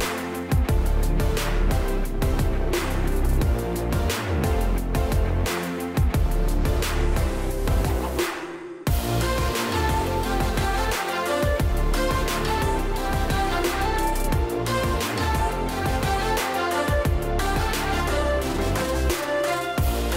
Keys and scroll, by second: 3.8 shift+Right, 7.6 space, 12.2 space, 12.7 space.